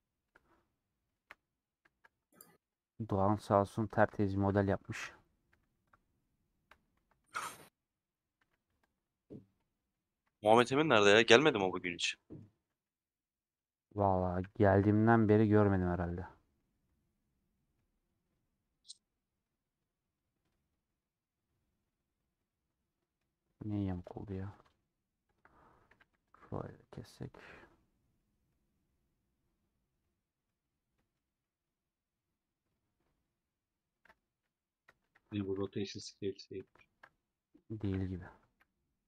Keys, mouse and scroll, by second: 0.3-1.3 middle drag, 1.3 2, 1.5 click, 1.8-2.8 shift+middle drag, 2.8 ctrl+click, 3.8 ctrl+click, 4.3 shift+click, 5.6 a, 5.8-9.2 drag, 9.2-10.3 middle drag, 10.3 Tab, 12.0 middle click, 12.6 a, 13.5 /, 13.9 middle click, 14.3 m, 15.4-16.6 middle drag, 16.6 2, 21.5-24.1 middle drag, 24.1 2, 25.9 a, 28.5-34.4 middle drag, 34.4 /, 34.9 Tab, 35.3-36.4 drag, 36.4-37.6 middle drag, 37.6 click, 38.5 /, 38.9 middle click.